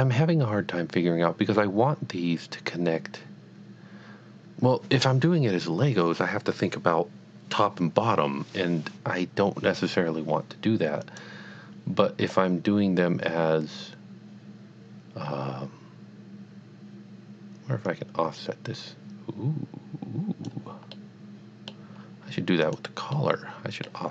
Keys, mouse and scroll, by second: 11.1 click, 17.9 click, 20.9 middle click, 22.1-22.6 scroll down 1, 22.7 click, 23.1 middle click, 23.4 middle click.